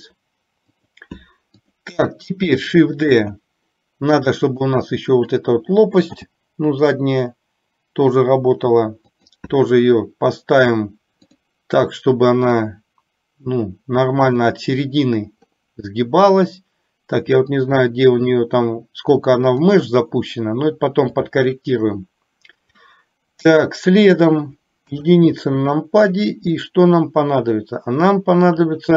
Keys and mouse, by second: 1.8 click, 3.2 shift+d, 6.2 g, 11.3 click, 12.6 click, 13.0-14.5 drag, 17.6-19.7 drag, 21.6 shift+middle click, 23.0-24.5 middle drag, 24.9 KP_1.